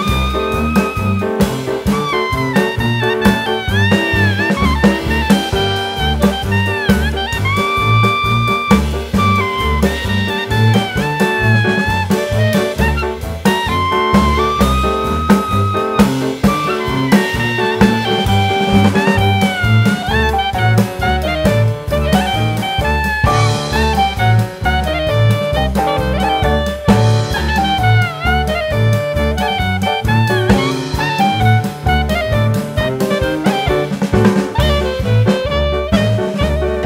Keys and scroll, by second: 1.8 KP_1, 2.9 g, 10.6 Tab, 14.3 ctrl+b, 24.2 KP_1, 24.6 g, 25.7 g, 33.0 Tab, 35.2 Delete.